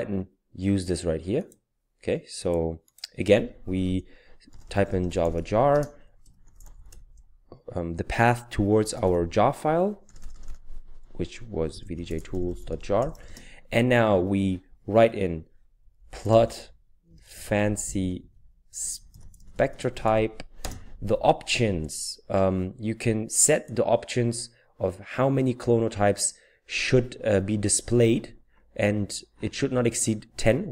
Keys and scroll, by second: 4.2-7.4 typing, 8.6-10.4 typing, 11.5-13.6 typing, 15.8-20.6 typing.